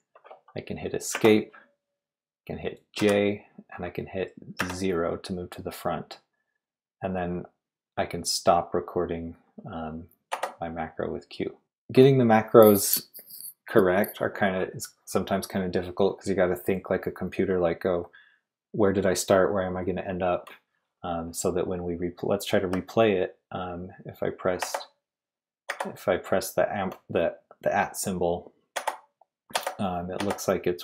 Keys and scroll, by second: 1.1 Escape, 3.0 j, 4.6 0, 10.3 q, 24.6 shift+q, 25.7 shift+q, 28.7 shift+q, 29.5 shift+q, 30.2 shift+q.